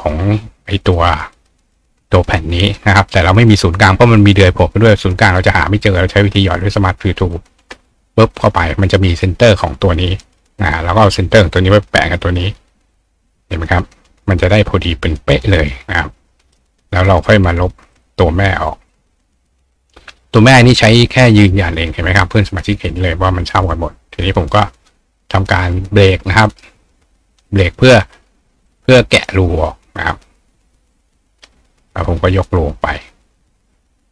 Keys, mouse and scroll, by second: 0.9 ctrl+click, 6.4 click, 7.3 click, 8.4 click, 10.2 click, 11.0-14.1 drag, 15.9 click, 16.5 click, 17.9 click, 18.9 click, 24.3 click, 26.5 right click, 27.5 click, 28.7 click, 29.5 click, 30.9 alt+click, 33.0-34.1 drag.